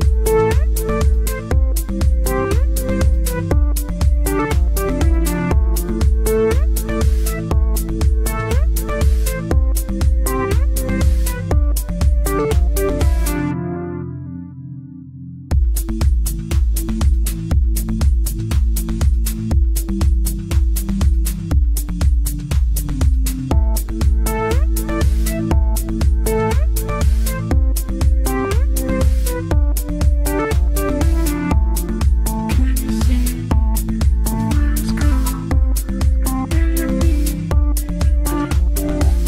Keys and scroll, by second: 17.3 c, 25.1 Delete.